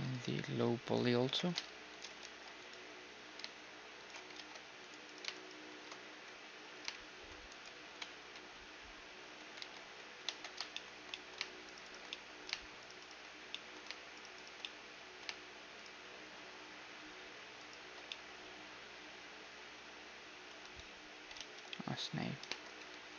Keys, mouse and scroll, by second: 0.7 middle click, 1.0 z, 1.2 g, 2.2 ctrl+r, 4.3 ctrl+Tab, 5.0-7.5 right drag, 6.1 2, 6.6-9.3 middle drag, 6.9 shift+3, 7.5-9.3 drag, 7.8 Tab, 8.1 2, 9.4 2, 10.1 1, 10.2 Tab, 10.7 middle click, 11.7-13.5 drag, 11.7-19.1 right drag, 13.5-17.5 middle drag, 18.1-19.9 middle drag, 20.6 a, 21.3 ctrl+z, 22.7 a.